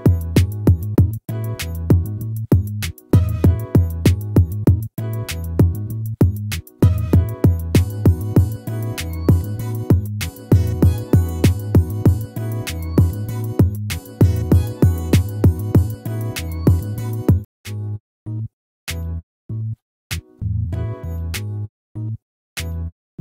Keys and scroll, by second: 5.3 ctrl++, 11.5 ctrl+-, 16.3 ctrl+-, 18.6 ctrl++.